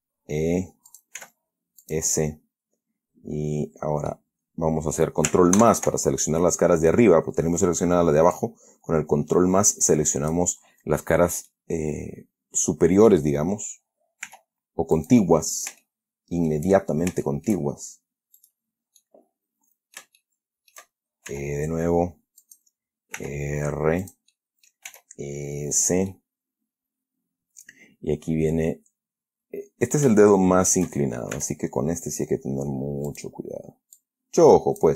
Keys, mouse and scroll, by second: 1.2 click, 1.5 s, 2.1 click, 5.9 ctrl+KP_Add, 8.7-10.8 drag, 11.8-13.6 middle drag, 14.6 r, 15.3 click, 16.1 shift+middle click, 17.0-17.4 shift+scroll down 1, 17.6 shift+middle click, 18.7 right click, 19.3-21.2 middle drag, 21.6 e, 22.7 click, 23.5 r, 24.3 click, 24.6 middle click, 25.2 s, 26.1 click, 26.4-30.5 middle drag, 31.7 e, 33.4 click, 34.3-34.9 drag.